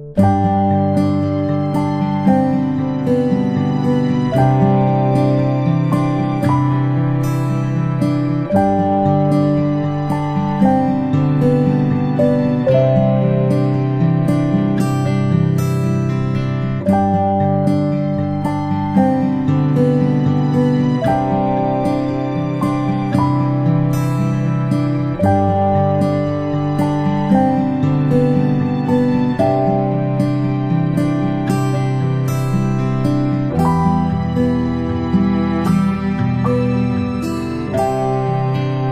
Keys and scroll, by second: 33.0 ctrl+p.